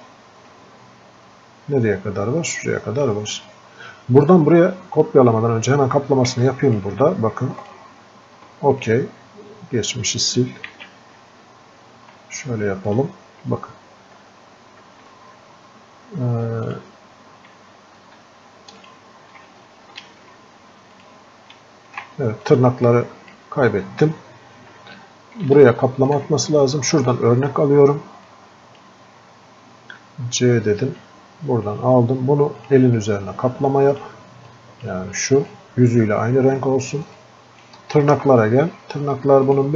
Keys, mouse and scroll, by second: 14.3 scroll down 1, 22.8-24.8 drag, 24.8 scroll up 1, 25.7 alt+click, 26.1-27.9 alt+scroll up 2, 27.9-28.3 alt+scroll up 1, 28.6 click, 34.9 click, 35.5 alt+click.